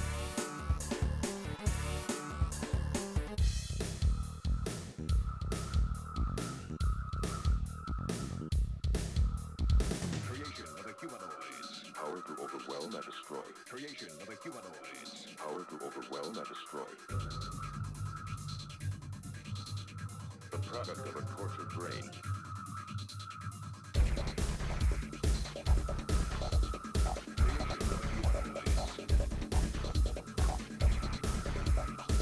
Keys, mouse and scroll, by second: 0.0 click, 1.0-5.6 middle drag, 6.1 2, 6.4 1, 6.6 shift+click, 7.7-8.8 drag, 8.8-10.1 right drag, 10.1 click, 10.5 middle click, 11.2 shift+click, 11.3 right click, 11.9 click, 12.7 right click, 13.2-14.8 drag, 14.8 right click, 15.4-17.4 drag, 17.4-24.7 typing, 17.6 shift+click, 18.2 shift+click, 18.8 click, 20.1 shift+click, 20.5 shift+click, 21.3 shift+click, 21.8 shift+click, 22.5 shift+click, 23.1 shift+click, 23.8 shift+click, 24.2 shift+click, 25.0-26.4 drag, 26.5 Delete, 27.1 Delete, 27.3 click, 27.4 Delete, 27.5 click, 27.6 Delete, 28.4 click, 29.1 f, 29.3 shift+click, 29.6 f, 29.8 shift+click, 30.3 middle click, 30.5 click, 30.7 middle click, 30.9 shift+click, 31.3-32.2 typing, 31.4 shift+click, 31.9 middle click.